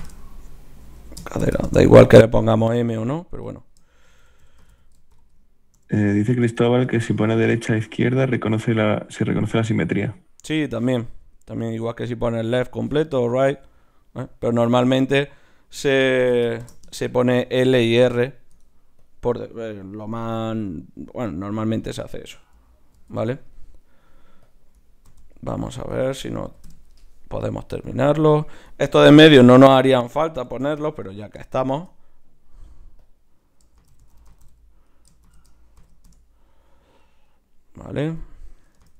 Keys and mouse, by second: 2.7-4.4 right drag, 3.4-17.9 drag, 17.9-21.8 right drag, 18.2 middle click, 19.0-21.8 drag, 19.6-20.7 middle drag, 23.9 right click, 27.6 right click, 29.3-31.5 drag, 31.5 middle click, 32.2 right click, 34.0 click, 34.3 l, 37.3-38.9 right drag, 38.2-38.9 drag.